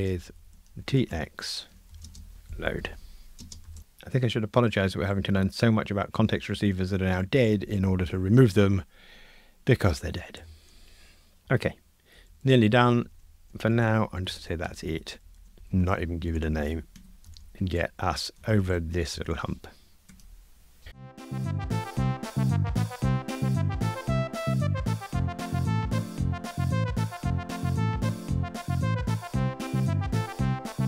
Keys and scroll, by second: 10.4 super+F9, 13.6 alt+shift+Left, 15.6 alt+shift+Left, 16.9 Escape, 17.1 alt+shift+Right, 17.9 F2, 18.5 alt+shift+Right, 20.1 alt+shift+Right, 21.8 super+F9, 23.3 super+F9, 23.7 alt+shift+Right, 23.9 Escape, 24.0 super+F9, 25.1 super+F9, 25.7 Delete, 25.9 super+F9, 27.1 alt+shift+Left, 27.4 super+c, 27.6 alt+shift+Left, 27.7 super+v, 28.0 ctrl+r, 29.3 Return, 29.4 alt+shift+Right, 29.7 ctrl+r, 30.2 alt+shift+Right, 30.4 ctrl+r, 30.8 alt+shift+Right.